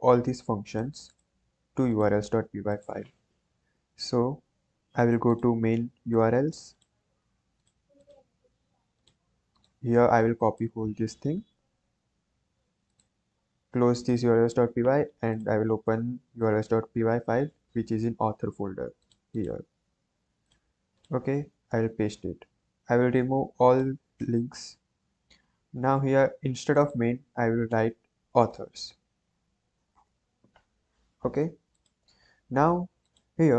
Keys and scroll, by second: 11.1 ctrl+c, 21.8 ctrl+v, 24.2 BackSpace, 27.6-29.8 typing, 29.9 Return, 31.3 ctrl+s.